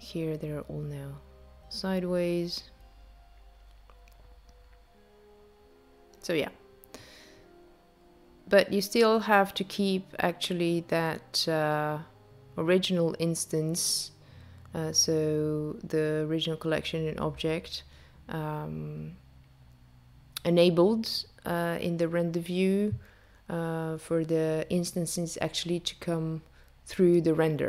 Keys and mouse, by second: 6.8 click, 8.1 click, 10.4 click, 15.5 shift+click, 19.6 shift+click, 23.8 shift+click, 27.5 shift+click.